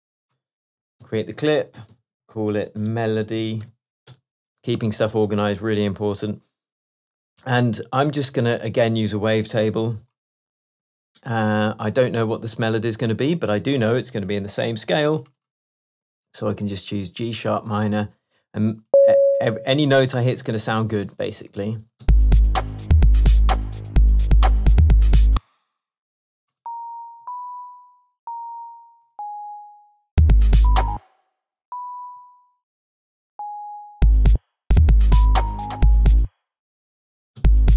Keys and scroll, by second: 1.1 shift+super+m, 2.0 shift+super+r, 2.3 shift+super+r, 2.9 shift+super+m, 3.0-4.2 typing, 4.7 shift+Return, 4.8 shift+Tab, 20.3 shift+Tab, 22.1 space, 25.4 space, 27.3 Up, 31.0 space, 32.2 Left, 33.7 Right, 34.0 space, 36.2 space, 37.4 space.